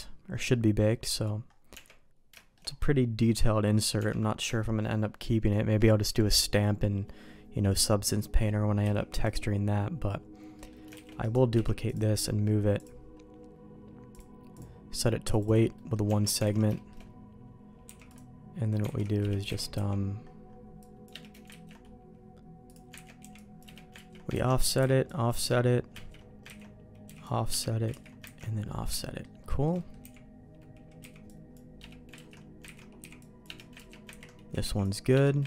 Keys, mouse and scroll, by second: 1.7 Tab, 2.3 shift+middle click, 3.9 Tab, 4.6 shift+middle click, 8.8 h, 9.2 click, 10.5 middle click, 10.9 shift+d, 11.5 m, 12.7-14.0 drag, 14.1 click, 15.3 click, 15.7 middle click, 16.0 Tab, 16.4 alt+a, 16.7 shift+middle click, 17.8 c, 19.5 alt+a, 19.7 c, 21.4 ctrl+q, 22.6 click, 22.9 ctrl+x, 23.2 c, 24.1 ctrl+q, 24.4 ctrl+x, 24.7 c, 25.9 ctrl+q, 26.5 ctrl+x, 27.0 c, 27.9 ctrl+q, 28.3 ctrl+x, 28.6 middle click, 28.9 shift+middle click, 29.4 shift+middle click, 29.7 middle click, 30.0 x, 31.0 c, 32.1 ctrl+q, 32.7 ctrl+x, 32.9 c, 33.7 ctrl+q, 34.1 ctrl+x, 34.6 c.